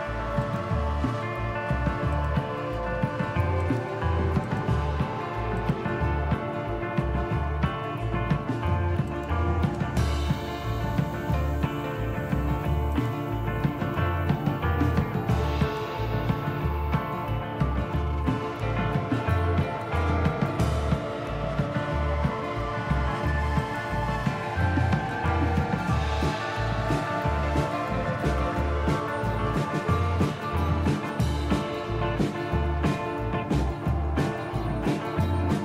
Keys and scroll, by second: 26.9 Up, 27.2 Up, 33.9 Down, 34.4 Return.